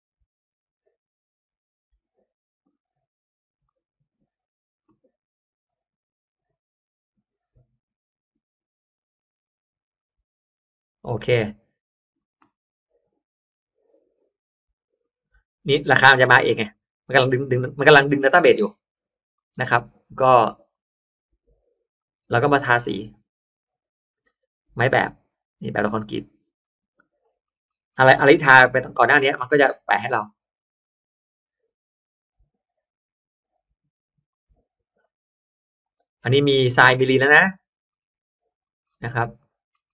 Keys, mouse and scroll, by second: 3.6 click, 5.6 click, 13.3 click, 14.9 click, 16.6 click, 17.8 middle drag, 18.2-18.6 middle drag, 19.3 click, 20.6 click, 21.9 click, 23.5 click, 26.5 click, 27.2-28.3 scroll up 2, 28.7 click, 29.1-29.5 scroll down 1, 29.3 click, 29.5-29.9 scroll up 1, 29.7 middle click, 30.3 middle click, 30.7 middle click, 33.8 middle click, 34.2 click, 35.7 click, 36.2-36.5 scroll down 1, 36.7 middle click, 37.3-38.1 scroll up 2, 38.4 click, 38.7-39.1 scroll up 1, 39.3 middle click, 39.8-39.9 scroll up 2.